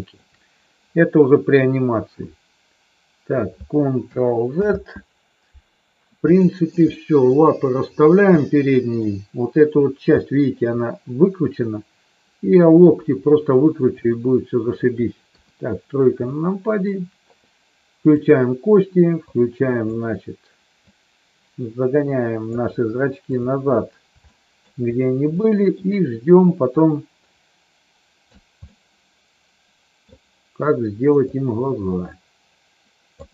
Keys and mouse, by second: 4.5 ctrl+z, 6.3 middle click, 6.9 middle click, 8.4 middle click, 10.2 shift+middle click, 14.0 middle click, 15.2 KP_3, 16.2 shift+middle click, 18.2 click, 19.3 click, 20.8-22.5 drag, 23.3 click, 24.2 shift+middle click, 25.4 shift+middle click, 26.8-28.3 drag, 28.7-30.0 middle drag, 31.2-33.2 drag.